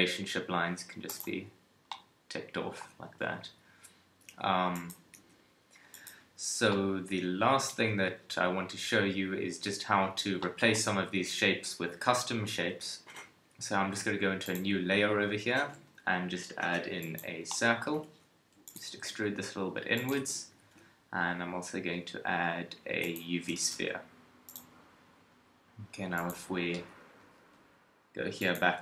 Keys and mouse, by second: 3.3 KP_3, 5.2 g, 7.8 KP_1, 12.6-14.4 middle drag, 12.6 KP_1, 15.6 shift+a, 17.1 middle click, 18.0 Tab, 18.5 e, 19.0 s, 20.0 middle click, 20.2 Tab, 20.6 shift+a, 23.5 g, 26.2-28.1 drag.